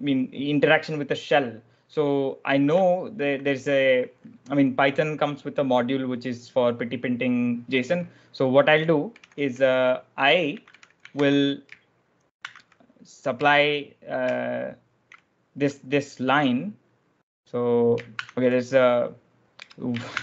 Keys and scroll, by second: 8.8-12.3 typing, 10.5 Escape, 13.4 BackSpace, 18.0 shift+5, 19.5-20.2 typing.